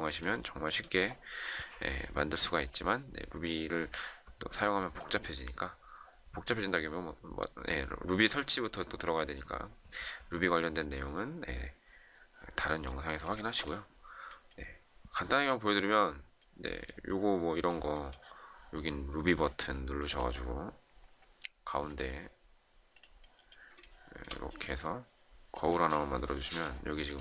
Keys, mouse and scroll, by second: 13.3 shift+middle click, 23.7 shift+middle click.